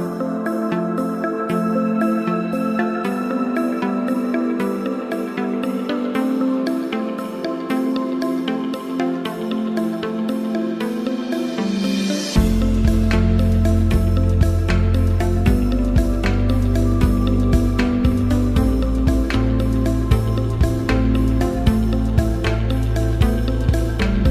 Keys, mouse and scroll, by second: 1.6 click, 6.8 ctrl+z, 7.6 click, 15.7 click, 21.0 right click, 21.6 click, 22.6-24.3 alt+shift+drag.